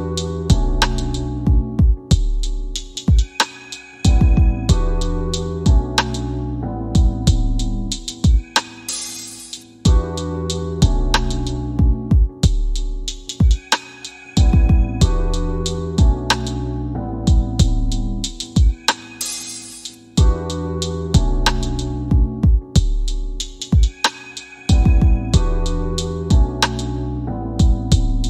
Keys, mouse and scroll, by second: 0.9-6.4 drag, 9.1 click, 11.0-12.5 drag, 14.7-15.9 drag, 16.7 click, 21.9 click, 24.5 click, 26.1 click.